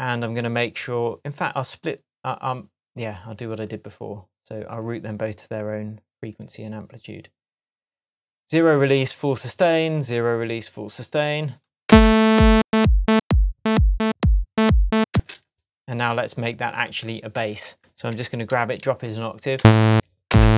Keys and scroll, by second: 11.8 space, 15.1 space, 18.1 super+a, 19.0 shift+super+a, 19.5 shift+Down, 20.2 shift+space.